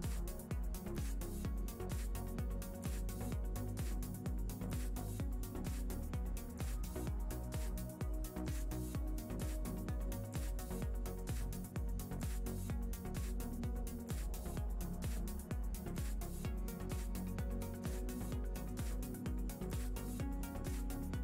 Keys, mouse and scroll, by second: 1.9 middle click, 3.4 n, 4.0 middle click, 4.8 click, 5.3 x, 6.5 shift+a, 10.6 f, 14.3 click, 16.4 click, 16.9 click, 18.0 shift+a, 20.3 s.